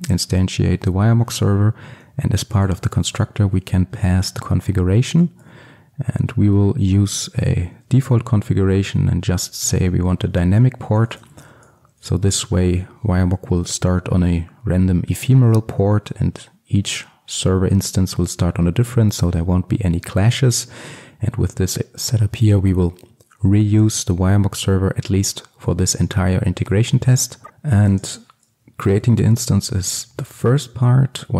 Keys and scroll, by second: 5.3 Return, 11.9 Return, 13.6 ctrl+alt+super+l, 27.4 ctrl+x.